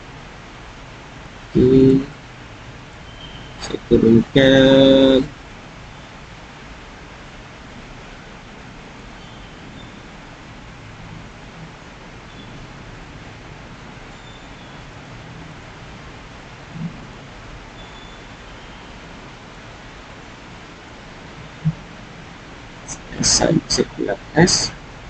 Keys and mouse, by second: 1.1 click, 2.1 click, 3.9 g, 5.1 z, 9.5 s, 16.3 click, 19.0 click, 20.9 g, 22.6 s.